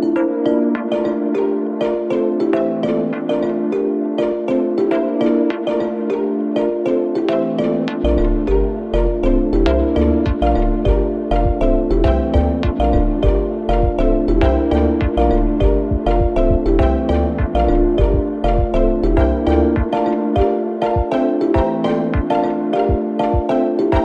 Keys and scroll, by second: 1.4 4, 6.3-8.0 typing, 10.3 2, 10.8 ], 11.6 ], 14.9 4, 15.9 3, 16.7 ], 17.1 Delete, 18.5 4, 22.9 ctrl+d, 23.0 Escape.